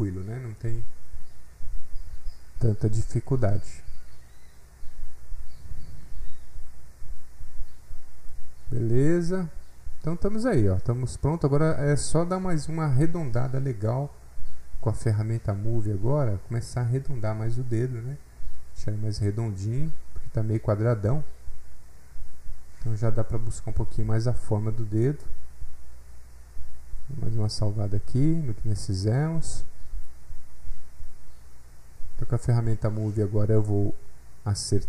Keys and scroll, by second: 31.6 alt+F8, 31.7 alt+Tab.